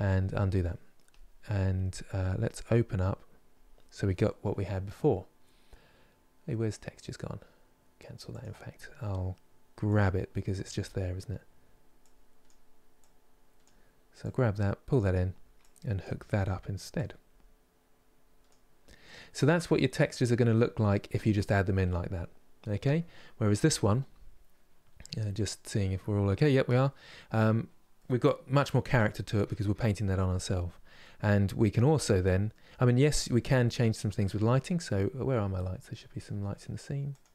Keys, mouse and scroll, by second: 0.8 click, 3.4-13.3 drag, 18.2 click, 18.7-20.8 middle drag, 20.8-27.7 scroll up 5, 27.7-32.5 middle drag, 32.5-33.3 scroll down 5, 33.3 middle click, 34.3-35.1 scroll down 3, 35.1-36.9 scroll up 1, 36.9 click.